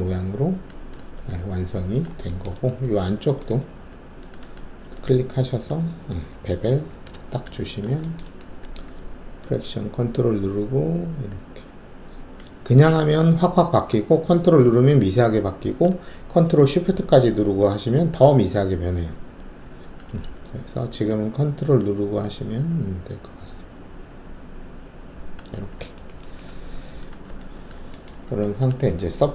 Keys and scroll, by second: 3.0 alt+2, 6.9 alt+shift+b, 26.4 ctrl+alt+`.